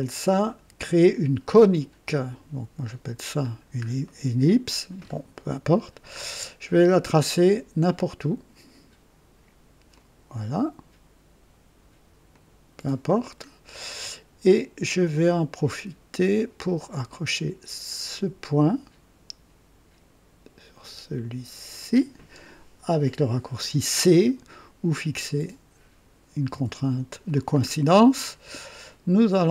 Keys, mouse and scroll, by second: 2.1 click, 3.4-3.9 scroll down 2, 4.0 right click, 5.0 scroll up 2, 5.7 scroll down 2, 7.3 click, 9.9 click, 12.3 click, 13.4 scroll up 2, 13.8 right click, 16.4 right click, 18.0 click, 21.7 click, 26.5 c, 27.6-28.0 scroll up 1, 28.2 right click.